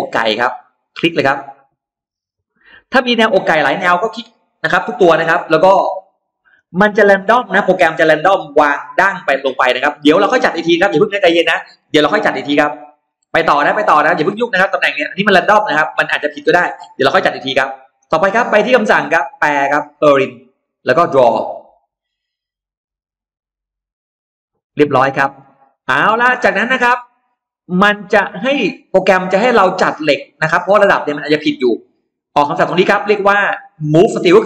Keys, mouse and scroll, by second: 2.1 click, 5.9-6.7 scroll down 2, 6.2 middle click, 6.8-7.7 scroll up 2, 8.0 e, 8.1 click, 8.7-9.7 scroll down 1, 13.1-13.8 scroll down 2, 13.5 middle click, 14.2-14.5 scroll up 1, 15.8 middle click, 15.8 scroll up 1, 18.2 click, 19.7 click, 20.8 click, 24.6-24.9 scroll down 2, 24.9 middle click, 25.4-25.7 scroll up 2, 26.0 middle click, 26.5 scroll down 1, 27.8-30.5 drag, 31.0 scroll up 1.